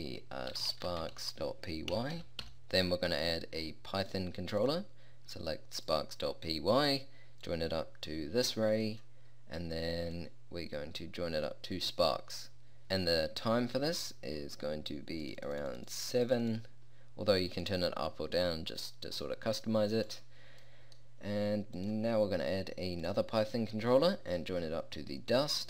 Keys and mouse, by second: 4.8-9.4 drag, 10.2-12.2 drag, 15.3-20.1 drag, 20.2-23.6 drag, 24.4-25.6 drag.